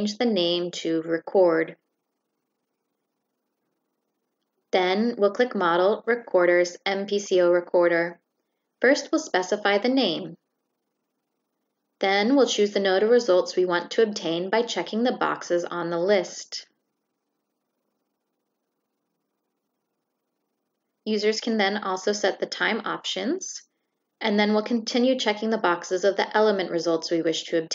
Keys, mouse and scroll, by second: 0.1 click, 5.4 click, 7.3 click, 8.4 shift+click, 13.1 click, 13.6 click, 16.0 click, 16.6 shift+click, 23.8 click, 24.3 click, 25.2 click, 25.8 click.